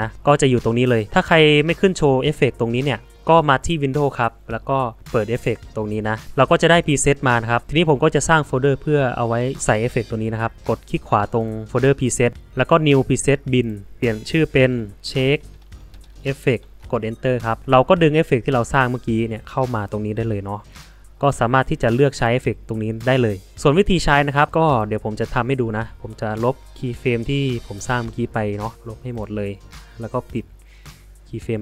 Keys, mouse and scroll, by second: 24.9 click.